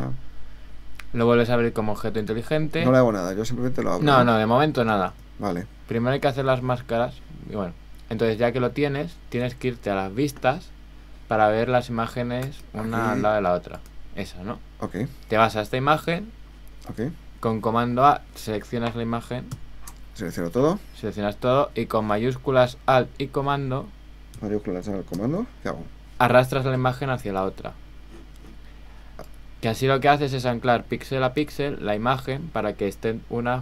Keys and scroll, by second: 5.1 super+Tab, 19.5 super+a.